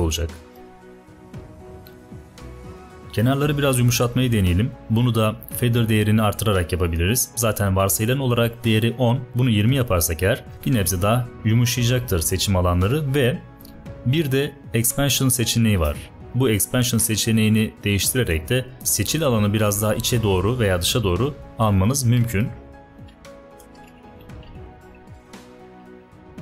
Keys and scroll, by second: 0.5 space, 3.8 ~, 22.3 shift+Down, 23.8 shift+Up, 24.0 shift+Up, 24.4 shift+Down, 24.5 shift+Down, 24.7 shift+Down, 25.7 shift+Up, 25.9 shift+Up.